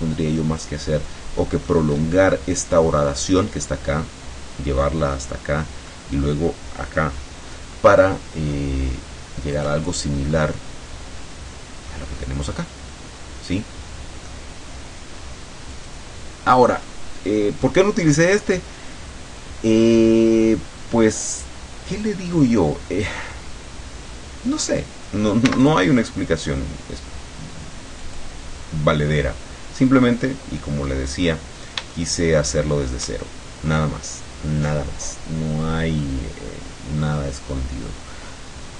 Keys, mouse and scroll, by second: 1.5 middle click, 2.0 scroll up 1, 5.4 middle click, 7.5-7.9 scroll down 1, 7.9 middle click, 9.9-11.3 scroll down 1, 11.3 middle click, 12.7-14.5 middle drag, 15.8 click, 16.8-17.1 scroll up 2, 25.5 x, 25.7 click, 28.1 click, 28.6-29.3 scroll down 1, 29.3-29.8 scroll down 1, 29.8-31.1 middle drag, 31.1-32.1 scroll up 1, 32.1-33.2 shift+middle drag, 33.3 shift+scroll down 2, 33.9-36.3 middle drag, 36.6-37.1 scroll up 2, 37.6-38.0 scroll down 2, 38.3 middle click.